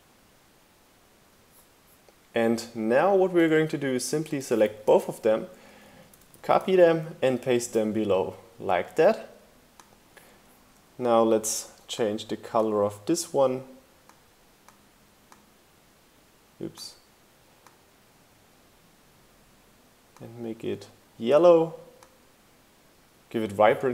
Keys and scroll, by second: 4.8 super+c, 4.8 super+v, 5.0 shift+Down, 6.2 super+c, 6.4 super+v.